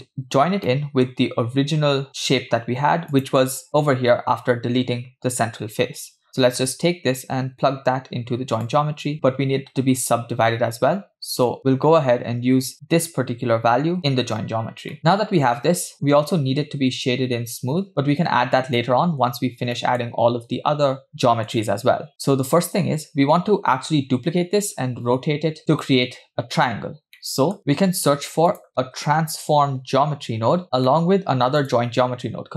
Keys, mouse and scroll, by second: 0.7 middle click, 1.7 scroll up 2, 3.1 click, 6.7-8.7 drag, 9.1 middle click, 11.5 click, 12.7-14.1 drag, 14.9-16.1 middle drag, 19.2-19.7 scroll down 2, 19.8 middle drag, 21.1 middle click, 21.1-21.5 scroll down 2, 22.1-23.7 scroll up 3, 27.2 middle click, 27.6 click, 27.7 shift+a, 30.6 scroll down 2, 30.9 middle click, 31.6-32.5 drag.